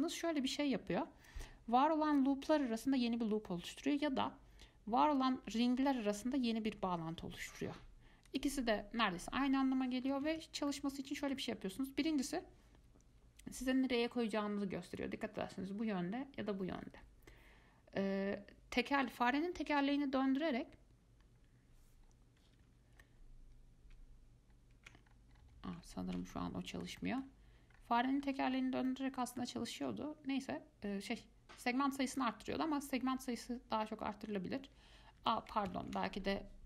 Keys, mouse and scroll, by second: 8.5 click, 10.4 ctrl+z, 10.9-13.9 middle drag, 20.0-20.3 scroll up 1, 20.5-20.9 scroll down 1, 20.9-21.4 scroll up 1, 21.4 scroll down 1, 21.6-22.0 scroll up 1, 22.2-22.8 scroll down 1, 22.8 scroll up 1, 24.7 alt+scroll down 1, 25.3 scroll up 2, 25.6-26.0 scroll down 3, 26.5-28.0 shift+middle drag, 28.0 scroll up 1, 28.1 scroll down 5, 28.4-29.0 scroll up 4, 29.1-32.1 middle drag, 32.3 click, 35.4 Escape, 36.0 ctrl+z, 36.4 scroll down 2.